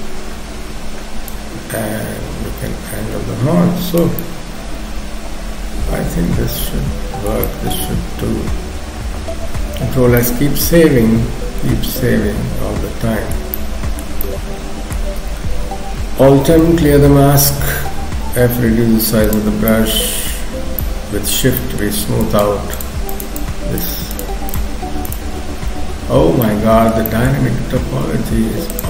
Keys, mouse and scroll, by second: 1.3 click, 4.2 middle click, 7.5 shift+middle click, 9.6 ctrl+s, 10.2 middle click, 13.5 shift+middle click, 16.4 alt+m, 18.2 f, 19.7 middle click, 20.8 middle click, 21.6 shift+middle click, 22.3 shift+click, 22.7 shift+click, 26.5 middle click, 27.1 shift+middle click, 28.7 click.